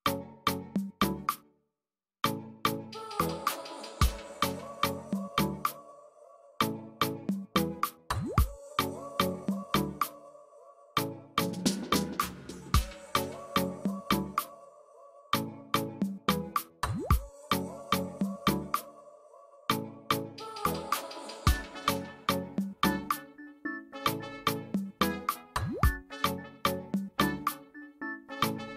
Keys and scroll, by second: 7.2 space, 11.3 space, 12.7 ctrl+space, 19.4 space, 22.7 space, 26.7 space, 27.7 ctrl+space, 28.0 ctrl+space.